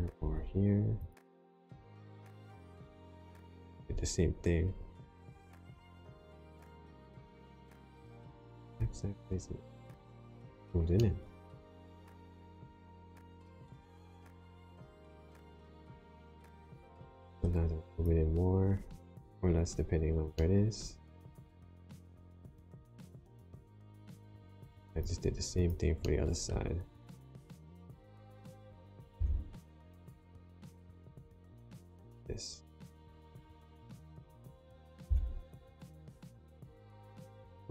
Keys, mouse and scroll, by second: 0.1 ctrl+r, 1.6 right click, 2.1 middle click, 3.3 click, 5.4 ctrl+r, 7.5 g, 8.6 x, 9.9 click, 10.9 middle click, 17.8 click, 20.3 middle click, 24.8 click, 25.4 click, 26.0 middle click, 26.6 scroll down 2, 27.2 middle click, 29.1 g, 29.8 x, 31.4 click, 33.7 click, 35.0 g, 35.6 x.